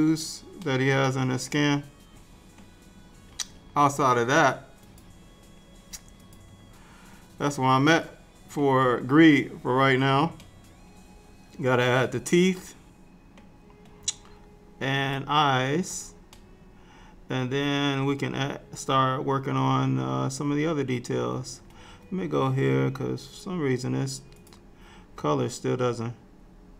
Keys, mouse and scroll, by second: 0.7 middle click, 4.9 click, 7.0-7.9 scroll down 3, 7.9 middle click, 9.0-10.4 scroll down 2, 10.4 middle click, 15.1 click, 16.4 middle click, 23.5-24.4 scroll down 4, 24.4 click, 24.4-24.8 scroll down 3, 26.1-26.7 scroll down 1.